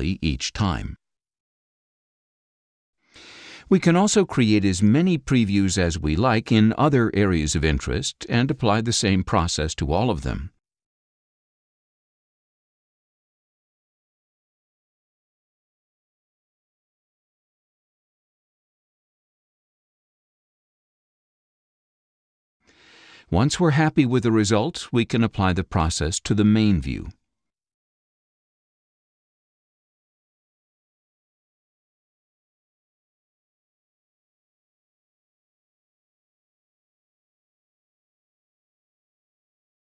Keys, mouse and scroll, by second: 4.2 click, 5.0 click, 6.5 click, 7.4 click, 8.9 click, 9.9 click, 11.3 click, 11.5-12.0 scroll down 8, 13.4 click, 17.7 click, 18.3-19.1 scroll down 8, 20.7 click, 29.7 click.